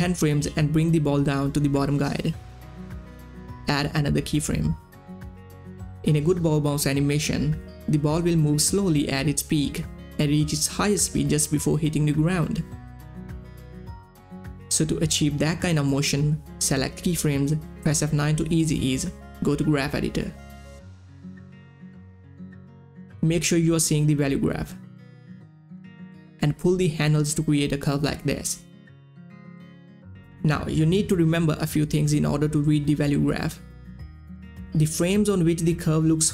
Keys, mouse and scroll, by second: 1.3-13.6 drag, 13.8-18.1 drag, 18.1 F9, 19.2-22.9 drag, 26.3 click, 27.0-34.4 drag, 34.4-36.3 drag.